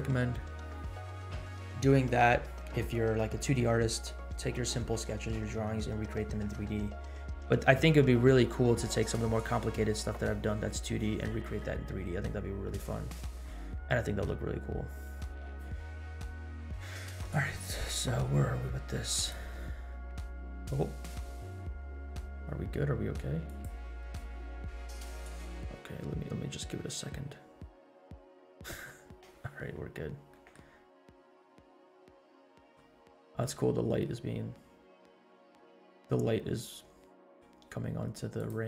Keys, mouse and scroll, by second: 12.6-13.5 middle drag, 13.7 scroll up 1, 24.2 middle click, 24.2 scroll up 1, 28.6 click, 28.6 scroll down 1, 29.8 scroll down 2, 30.3 middle click, 30.7 scroll up 2, 31.5 scroll up 2, 31.8-32.8 middle drag, 32.9 scroll down 2, 33.2 middle click, 33.6-34.0 scroll up 2, 34.0-35.1 middle drag, 35.2 scroll up 1, 36.0 scroll down 2, 36.8 scroll down 1, 37.1 middle click, 37.6 scroll down 1, 38.4 click.